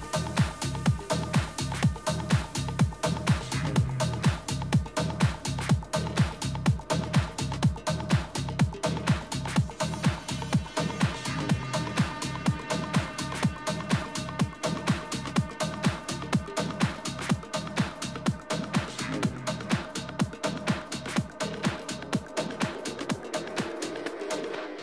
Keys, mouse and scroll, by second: 0.3-3.5 middle drag, 4.3-6.3 drag, 7.9 a, 8.4-10.2 right drag, 9.3-11.1 drag, 17.4-19.0 middle drag, 18.2 a, 19.0-20.2 right drag, 20.0 click, 20.8-22.0 drag.